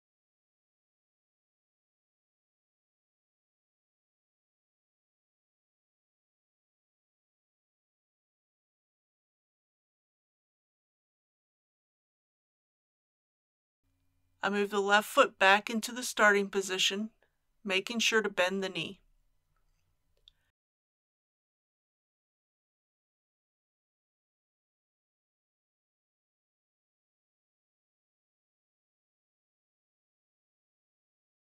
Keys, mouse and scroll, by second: 0.2 g, 3.6 click, 4.0 r, 5.9 click, 6.5 scroll up 1, 7.3-7.7 shift+scroll down 2, 9.1-12.5 middle drag, 15.1 click, 16.4 KP_3, 18.3-20.3 shift+middle drag, 22.3 g, 24.6 click, 27.7 click, 31.4 scroll down 1.